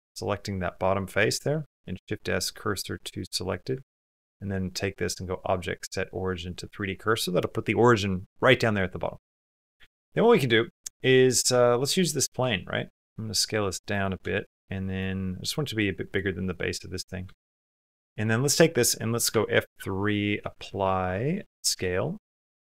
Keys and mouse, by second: 0.5 click, 1.1 click, 1.6 shift+s, 3.3 click, 3.5 Tab, 9.3 click, 9.7 shift+click, 10.0 middle click, 10.3 click, 10.5 middle click, 12.4 s, 14.1 shift+click, 14.5 click, 14.8 click, 15.6 s, 16.2 click, 16.6 click, 17.1 shift+click, 17.4 click, 17.7 click, 19.1 F3, 20.5 p, 21.5 BackSpace.